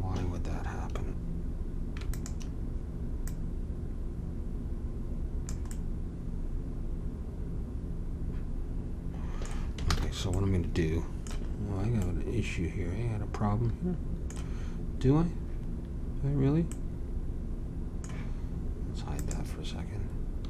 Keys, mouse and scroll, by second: 2.1-5.1 drag, 9.9 ctrl+z, 16.7-19.2 middle drag, 19.2-20.4 drag.